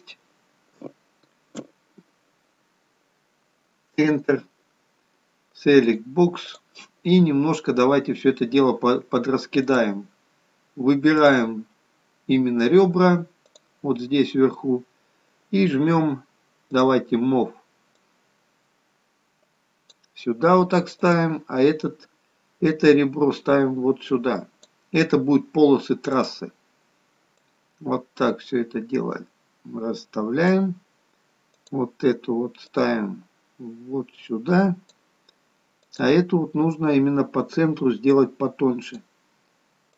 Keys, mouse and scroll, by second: 5.8 click, 6.5 click, 7.3-8.0 scroll up 4, 9.5 click, 11.1 click, 16.7 click, 18.0 click, 21.0 click, 22.8 click, 26.1 click, 27.3 click, 31.5 click, 32.6 click, 35.9 click, 38.0 click.